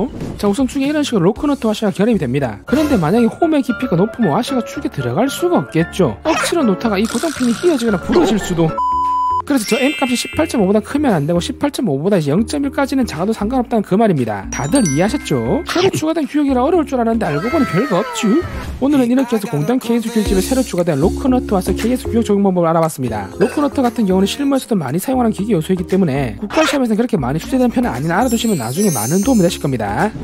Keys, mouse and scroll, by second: 0.5-6.6 drag.